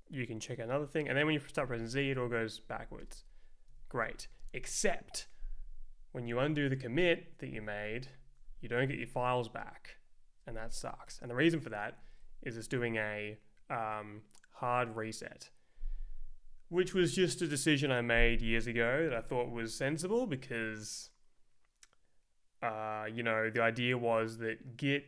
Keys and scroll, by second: 1.6 z, 2.0 Return, 2.7 z, 3.0 Return, 3.7 z, 4.0 Return, 8.0 Left.